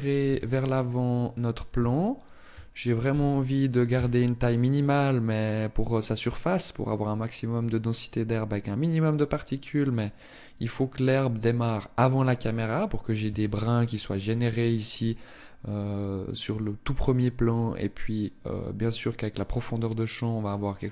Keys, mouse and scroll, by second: 0.0 Tab, 0.7 right click, 1.9 shift+right click, 2.6 g, 11.0 click, 13.0 Tab, 18.2 middle click.